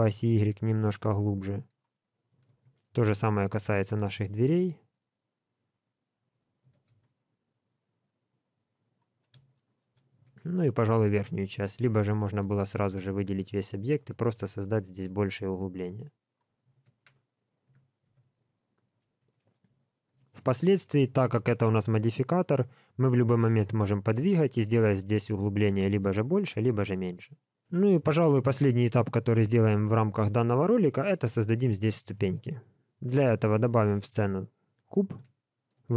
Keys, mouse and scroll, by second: 2.4 alt+a, 3.6 l, 9.5 shift+middle click, 10.3 alt+a, 11.5 l, 12.4 g, 16.8 alt+a, 17.3 scroll down 1, 17.6 Tab, 18.5 scroll down 1, 19.3 shift+middle click, 19.7-20.2 scroll down 2, 20.2 shift+middle click, 22.5 middle click, 24.4 scroll up 1, 24.8-25.6 scroll down 1, 25.6-26.2 scroll down 1, 26.5 shift+middle click, 28.7 middle click, 32.9 KP_3, 33.5 shift+a, 35.8 g.